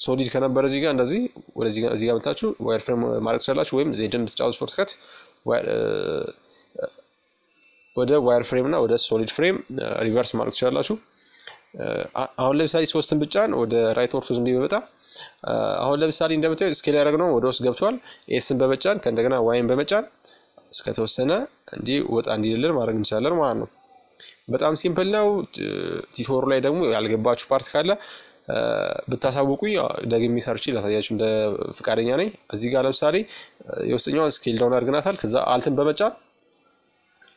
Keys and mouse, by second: 1.4 z, 2.1 z, 2.2 z, 2.7 z, 4.2-6.0 middle drag, 5.9 KP_5, 7.2 z, 8.4-9.5 middle drag, 9.5-11.3 drag, 10.2 KP_3, 11.5 z, 15.8 s, 22.4-24.2 middle drag, 23.6 KP_5, 24.3 z, 25.6-26.8 middle drag, 28.2-30.9 right drag, 30.9-32.7 middle drag, 33.1-35.2 right drag, 34.0-37.0 middle drag, 37.1-37.3 right drag.